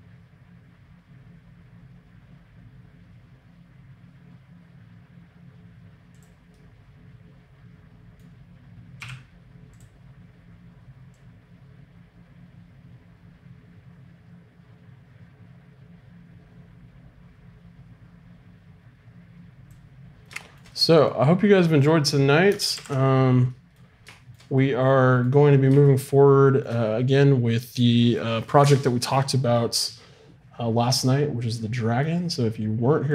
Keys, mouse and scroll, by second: 6.5-8.0 drag, 8.0 middle click, 9.0 i, 11.1-13.0 drag, 20.1 middle click, 21.8 right click, 22.7 alt+r.